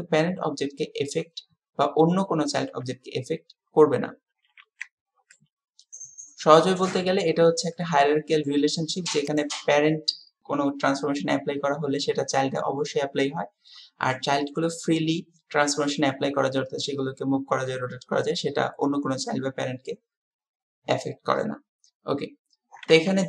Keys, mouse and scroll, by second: 4.7 alt+s, 5.4-7.1 middle drag, 7.7-8.5 middle drag, 9.3 click.